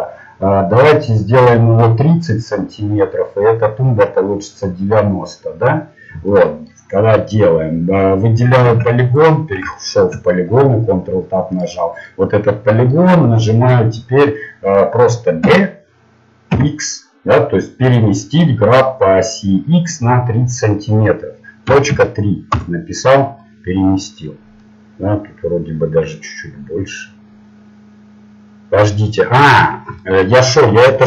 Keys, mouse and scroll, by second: 9.2 ctrl+Tab, 11.6 right click, 12.2-14.5 middle drag, 14.5-15.5 right drag, 15.5 g, 23.4-25.6 middle drag.